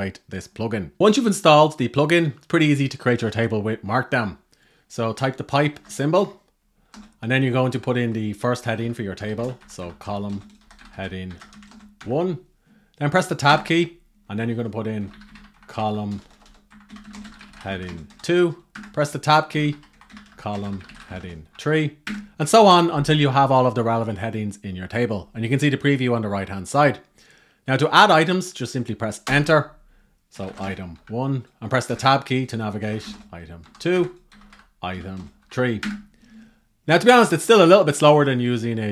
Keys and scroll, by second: 5.4 shift+F13, 8.5 shift+c, 14.7 shift+c.